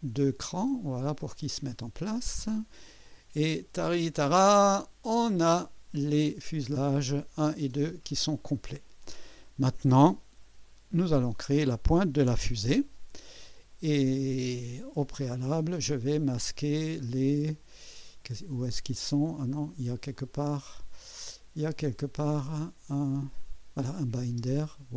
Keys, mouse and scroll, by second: 2.0 click, 3.1-4.1 drag, 4.3 click, 4.7-5.2 scroll down 2, 5.5-7.7 drag, 8.4 click, 9.0-9.8 right drag, 10.4 KP_1, 11.1 scroll up 1, 12.5 ctrl+s, 15.6 click, 16.3 scroll down 1, 17.0 scroll down 1, 20.1 click, 23.2 click, 24.0 click, 24.4 space.